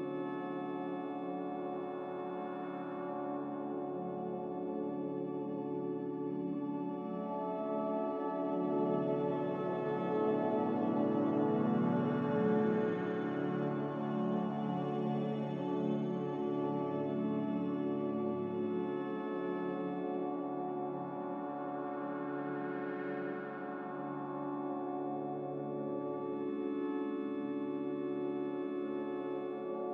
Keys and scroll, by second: 4.5 z, 8.1-8.9 typing.